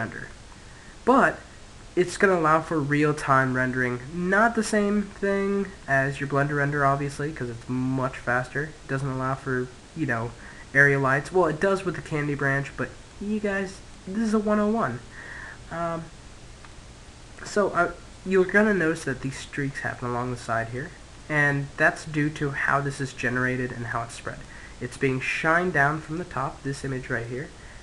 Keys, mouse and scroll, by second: 3.3-3.6 scroll down 1, 3.6-7.8 middle drag, 11.9-14.8 middle drag, 16.5-22.7 middle drag, 23.7-25.3 middle drag, 27.1-27.8 middle drag.